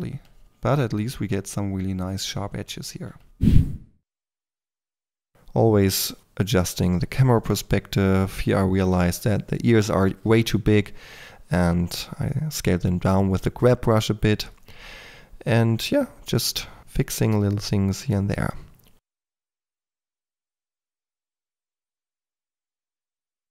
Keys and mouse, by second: 3.6 f, 3.8 click, 4.6-5.1 drag, 5.8 shift+Tab, 9.0 Tab, 9.2 f, 9.3 k, 9.6 click, 9.6 f, 10.5 click, 10.7-13.8 typing, 11.5-12.0 drag, 12.7 drag, 13.1 click, 13.4 click, 13.8 drag, 14.6-15.6 drag, 14.8 KP_3, 15.0 f, 15.7-16.1 drag, 16.2 k, 16.3 f, 16.5 click, 17.5 f, 17.8 click, 18.1 click, 18.4 click, 18.6-20.0 typing, 21.2-23.0 typing.